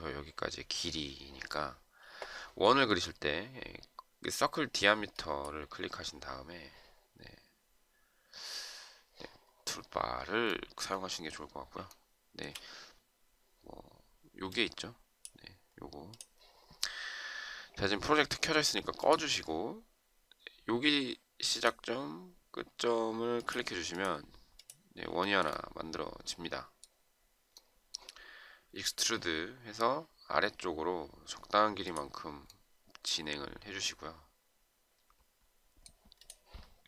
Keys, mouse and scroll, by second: 11.9 shift+right click, 25.2 shift+right click.